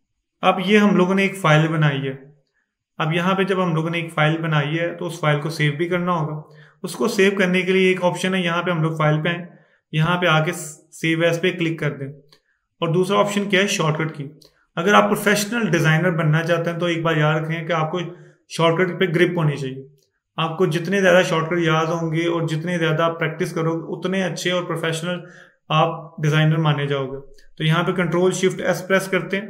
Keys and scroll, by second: 28.6 ctrl+shift+s.